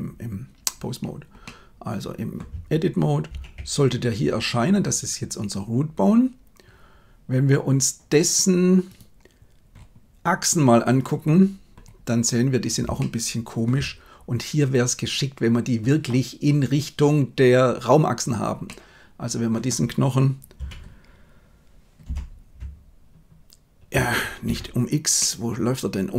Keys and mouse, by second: 1.5 middle click, 3.3 shift+a, 10.9 click, 13.1-13.7 shift+middle drag, 18.6-19.7 middle drag, 20.6 r, 25.2-26.1 middle drag.